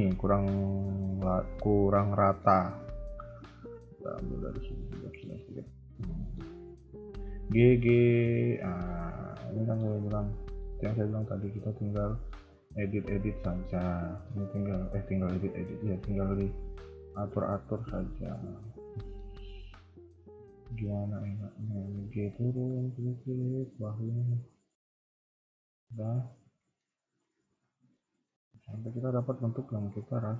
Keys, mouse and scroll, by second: 1.1 click, 2.1 middle click, 4.4 ctrl+click, 4.8 middle click, 5.3 KP_3, 6.0 middle click, 6.4 KP_1, 7.0 g, 8.9 middle click, 10.4 middle click, 10.7 KP_1, 11.5 click, 13.9 a, 14.1 a, 14.4 z, 15.7 click, 16.4 g, 16.6 click, 17.7 middle click, 19.3 KP_1, 21.2 g, 25.1-25.4 scroll down 2, 25.4 shift+middle click, 25.8 scroll down 1, 26.5 shift+middle click, 26.8 scroll up 2, 27.6 scroll up 2, 27.6 z, 28.0 click, 28.5 z, 29.2 KP_3, 29.4-29.9 scroll down 3, 29.8 Tab, 30.1 middle click.